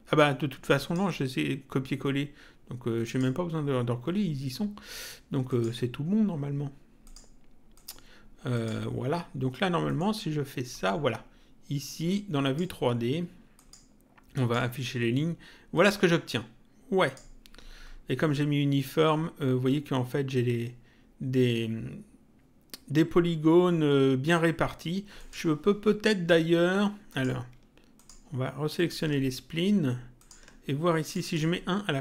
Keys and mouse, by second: 0.7 click, 3.0 click, 5.5 click, 7.0 click, 9.9 middle click, 12.0 click, 13.5 click, 15.7 click, 25.1 click, 27.1 click, 27.9 ctrl+click, 30.1 ctrl+click.